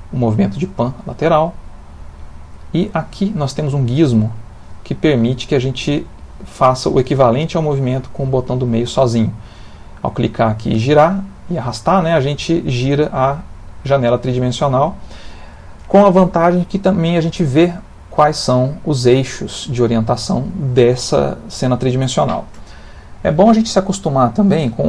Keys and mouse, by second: 3.6 click.